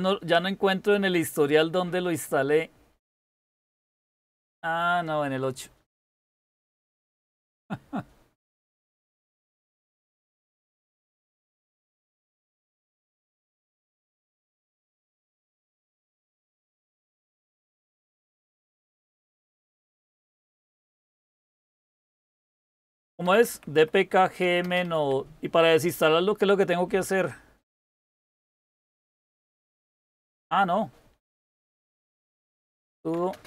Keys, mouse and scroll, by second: 10.4-14.4 typing, 14.6 Return, 20.5-21.7 typing, 22.9-24.8 typing, 30.5-33.4 typing.